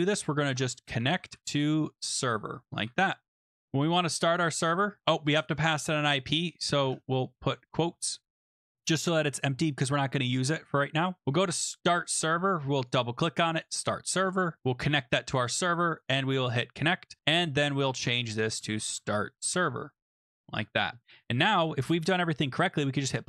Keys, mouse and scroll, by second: 0.0-1.9 typing, 2.2 Tab, 2.7 ctrl+s, 3.3-4.1 typing, 3.8 click, 5.0 scroll down 6, 6.0 click, 6.8-7.1 scroll, 8.8 ctrl+s, 11.2 click, 11.8 click, 12.7 click, 12.9 click, 13.6 click, 15.9 click, 17.2 click, 17.3 click, 17.6 click, 17.9 click, 18.3-20.0 typing, 20.1 Tab, 20.5 ctrl+s, 23.1 click.